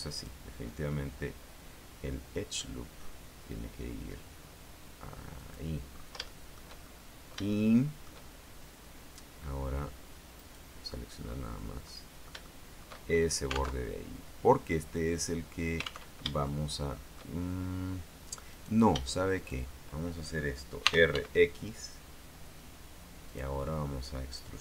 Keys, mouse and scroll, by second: 0.3 ctrl+click, 5.5 click, 5.9-6.5 scroll up 2, 6.5 shift+middle click, 7.0-8.3 shift+middle drag, 10.5 right click, 11.4-11.7 scroll down 1, 11.7-13.1 middle drag, 13.3-13.6 shift+scroll up 1, 13.9 alt+Tab, 16.3 alt+Tab, 16.6 alt+shift+click, 18.7 right click, 19.5 shift+right click, 21.0 r, 21.3 x, 23.4 click.